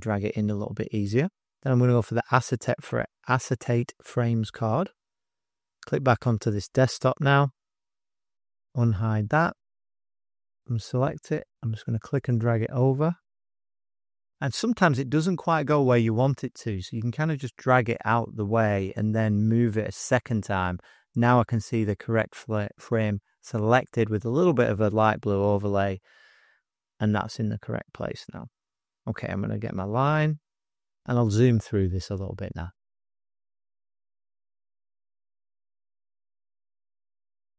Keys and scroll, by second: 36.3 ].